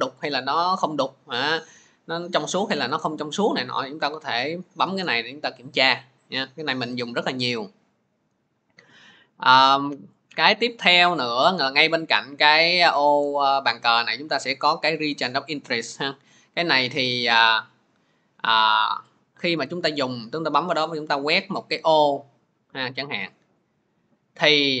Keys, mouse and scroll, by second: 4.5 click, 6.0 middle click, 10.6 click, 11.0 click, 16.6 click, 21.6 click, 23.1-24.8 drag.